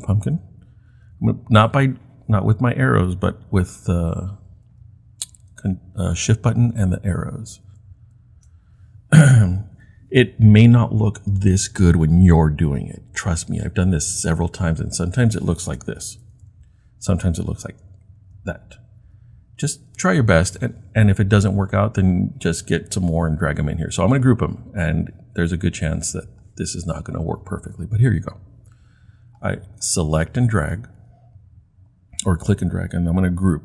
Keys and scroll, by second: 3.7 shift+Right, 4.1 shift+Right, 4.5 shift+Right, 8.0 shift+Right, 16.1 Left, 17.7 Right, 18.2 Right, 19.0 Left.